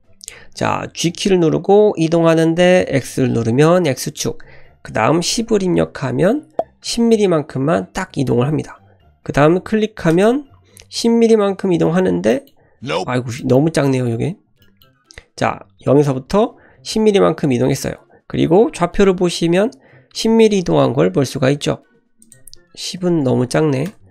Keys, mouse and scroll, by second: 1.1 g, 11.4-12.2 scroll up 5, 12.3 shift+middle click, 12.6-13.3 scroll up 3, 13.4 shift+middle click, 13.7-14.5 scroll up 4, 14.6 shift+middle click, 15.0-16.5 scroll up 2, 16.5-17.4 scroll up 1, 22.2-24.1 drag, 23.4 KP_0.